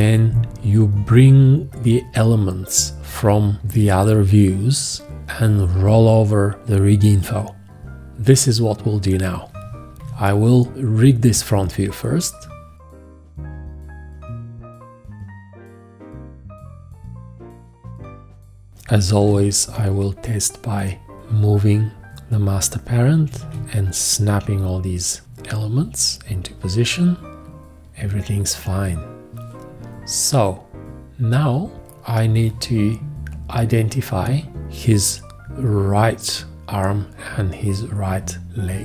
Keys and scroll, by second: 10.0 F4, 19.2 v, 22.9-23.9 typing.